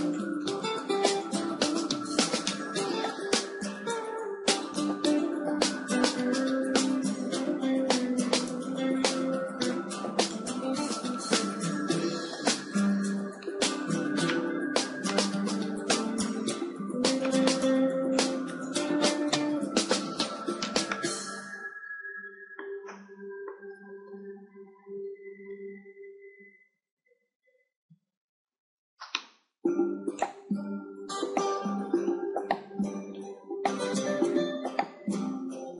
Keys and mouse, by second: 2.4-4.3 right drag, 3.5 g, 4.9-6.8 drag, 5.7 Tab, 6.8 a, 7.0 a, 7.9 z, 9.4 r, 11.3-14.2 drag, 12.0 g, 13.9 Tab, 15.4-18.2 middle drag, 15.4 z, 18.2-20.8 drag, 21.4-24.8 middle drag, 24.8 KP_7, 25.6-26.7 middle drag, 26.7 a, 27.0 a, 28.2 shift+d, 30.4-32.3 drag, 31.1 r, 32.0 r, 35.1-35.7 right drag.